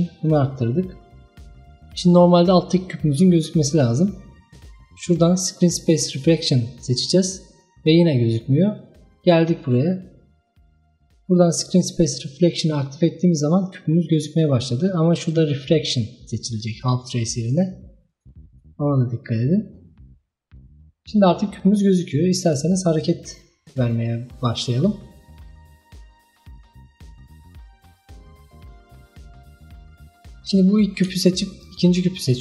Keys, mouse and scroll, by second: 1.9-2.6 scroll down 2, 2.6 scroll up 2, 3.2-3.7 scroll down 3, 4.1-4.9 scroll down 3, 4.9-5.8 scroll down 1, 5.8-8.8 drag, 9.3-12.4 drag, 13.2 scroll up 2, 14.2-20.6 drag, 22.5 click, 26.2-27.5 drag, 27.5-28.7 scroll down 6, 28.7-29.4 middle drag, 29.4-29.8 scroll up 3, 29.8-31.7 middle drag, 31.7-32.4 shift+drag.